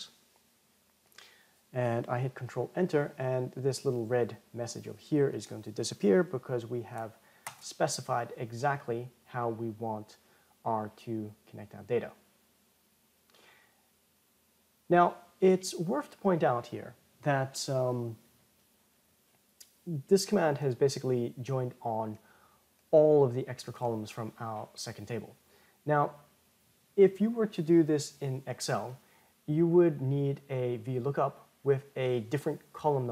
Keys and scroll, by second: 3.1 ctrl+Return.